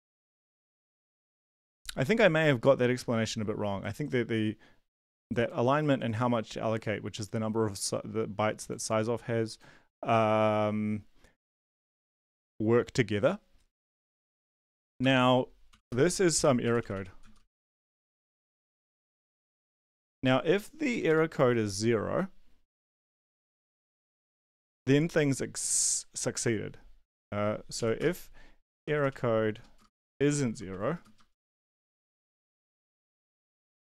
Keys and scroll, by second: 1.1 Up, 1.3 Down, 15.0 Home, 15.5-19.9 typing, 20.0 Down, 20.9 Return, 21.0 Return, 23.6-24.4 typing, 27.7-31.7 typing, 32.0 Up, 32.2 Delete, 32.4 End, 32.4 Left, 32.8 Left, 33.0 Left, 33.4 space.